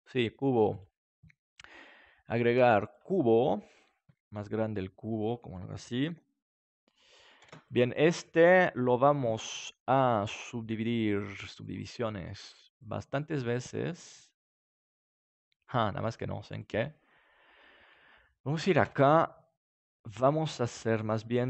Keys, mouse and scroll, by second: 0.7-4.5 drag, 4.3 s, 5.3-7.1 drag, 6.0 g, 7.2-9.0 drag, 7.4 ctrl+s, 10.0-11.8 drag, 12.7-15.4 drag, 16.5-18.4 drag, 18.8 Tab.